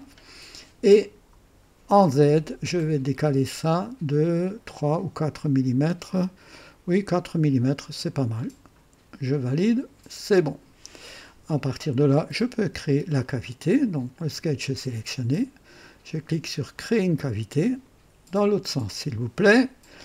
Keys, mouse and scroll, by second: 1.0 click, 1.7 scroll down 2, 2.4 scroll down 2, 3.4 scroll down 2, 5.1 scroll down 2, 9.4 click, 16.7 click, 18.8 click.